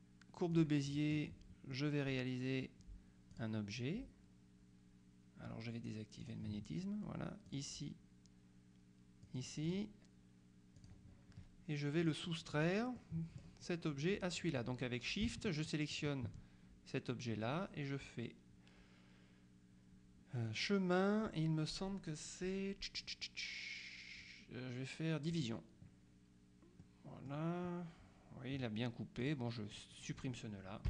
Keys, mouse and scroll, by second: 0.6 click, 1.0 middle click, 3.4 click, 6.3 click, 7.6 click, 9.3 click, 10.9 click, 12.1 click, 12.4 right click, 16.0 shift+click, 20.6 click, 25.4 click, 26.9 middle click, 29.3 click.